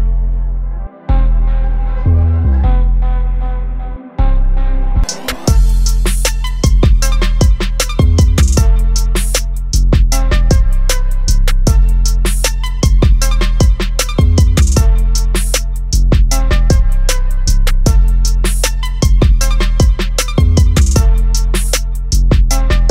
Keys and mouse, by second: 8.4 click, 12.4 click, 15.5 click.